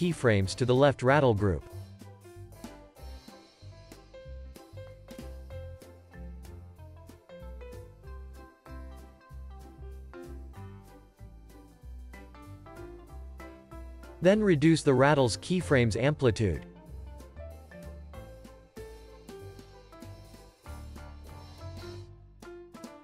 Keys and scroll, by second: 0.0 super+c, 3.4 alt+x, 5.0 super+v, 5.2 super+s, 10.3 c, 17.3 space, 18.8 space, 19.1 super+s, 19.6 z.